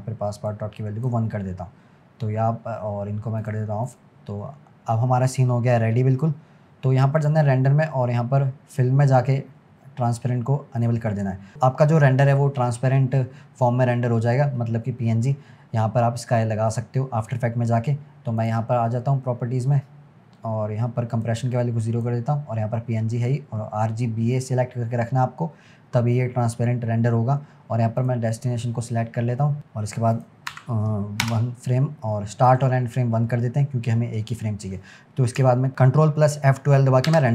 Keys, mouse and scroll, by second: 2.2-3.4 scroll up 1, 3.4 click, 3.9 click, 5.1 scroll up 1, 5.8 scroll down 1, 7.2 click, 7.8 scroll down 2, 8.8 drag, 9.0-10.8 scroll down 1, 10.8 click, 11.5-13.7 scroll down 1, 18.4 click, 21.3-24.3 drag, 28.0-29.6 drag, 30.2-33.3 drag, 34.4-35.7 scroll down 1.